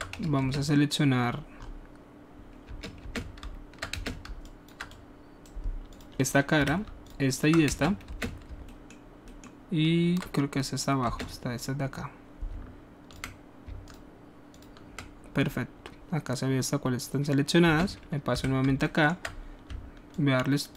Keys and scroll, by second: 0.4 alt+space, 2.6 space, 3.0 space, 3.9 space, 6.5-8.4 typing, 11.0 space, 17.7 space, 18.3 w, 19.6 alt+shift+w.